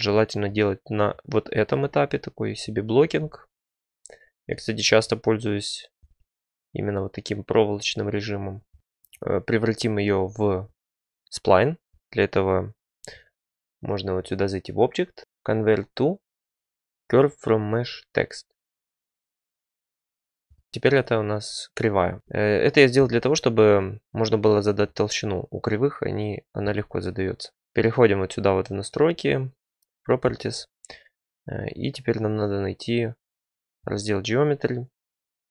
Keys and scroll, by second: 20.7 Tab, 20.7 Tab.